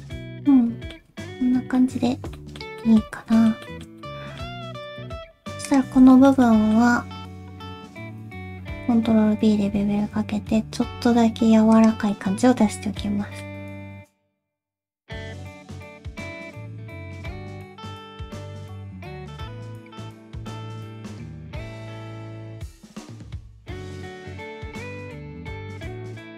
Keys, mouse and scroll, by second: 0.1 alt+z, 0.2 g, 0.2 middle click, 1.1 alt+z, 1.2 alt+z, 1.3-1.7 scroll down 3, 1.7 middle click, 2.3 middle click, 2.8 middle click, 3.3 shift+middle click, 3.6 shift+middle click, 4.0 middle click, 4.4-4.9 scroll up 2, 5.0 shift+middle click, 5.7 alt+click, 6.1 shift+middle click, 6.3 scroll up 1, 6.4 middle click, 6.9-7.7 scroll up 1, 7.9 ctrl+b, 8.0 alt+click, 12.1 middle click, 12.1-13.0 scroll down 1, 13.0-13.4 scroll down 2, 13.4 middle click, 14.0 shift+middle click, 14.0 scroll up 2, 14.1 click, 14.3 middle click, 14.6 shift+middle click, 14.8 scroll up 1, 15.0 ctrl+click, 15.3 shift+middle click, 15.5 middle click, 16.0 alt+s, 17.5 shift+scroll up 1, 17.5 shift+middle click, 18.3 shift+click, 18.6 g, 19.4 middle click, 19.7 shift+middle click, 20.1 click, 20.3 middle click, 20.5 g, 21.0 middle click, 21.7 middle click, 21.9 g, 22.5 middle click, 22.7 click, 23.0 ctrl+click, 23.2 middle click, 23.4 g, 24.1 scroll down 2, 24.1 middle click, 24.4 alt+z, 24.4 middle click, 24.5 middle click, 25.2 middle click, 26.2 ctrl+r.